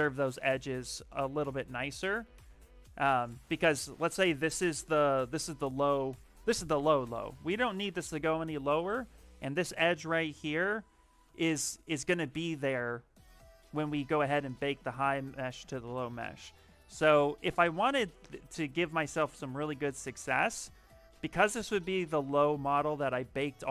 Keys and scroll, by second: 0.7 ctrl+z, 1.4 s, 23.1 f.